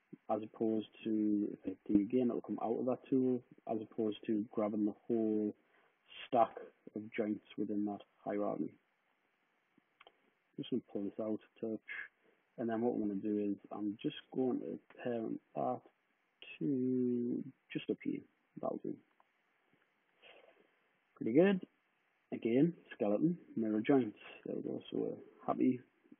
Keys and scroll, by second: 1.4 d, 6.7 super+z, 8.3 d, 11.8 w, 18.8 p.